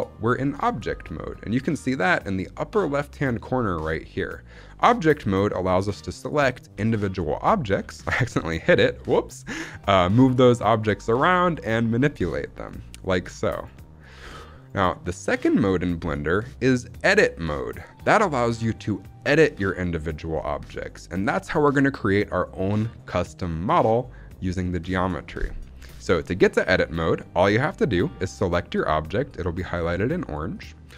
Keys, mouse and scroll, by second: 6.1 click, 6.6 h, 7.7 alt+h, 10.1 g, 10.9 right click, 11.3 r, 11.8 right click, 12.0 s, 12.5-12.9 right drag, 12.9 click, 13.1 g, 13.5 right click, 13.9 click, 14.5-16.3 right drag, 14.5 g, 18.0 click, 26.0-26.9 scroll up 3, 26.9-29.7 scroll up 3, 29.7 scroll up 1, 30.4 click.